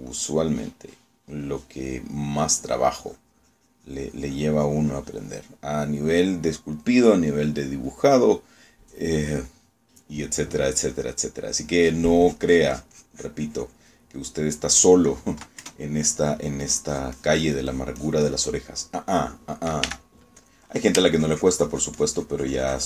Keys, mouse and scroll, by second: 4.1-6.5 drag, 13.3-15.0 drag, 15.3 middle click, 16.7 KP_Add, 17.7-19.6 drag, 19.7-20.9 middle drag, 20.9 f, 21.5 click, 22.3-22.8 ctrl+drag.